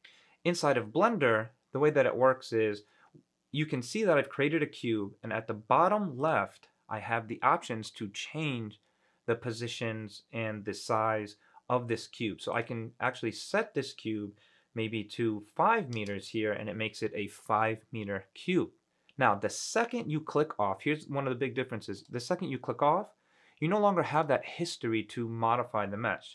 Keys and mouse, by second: 2.5 middle click, 6.4 click, 12.7 click, 13.3-16.1 drag, 22.2 click, 24.3 click.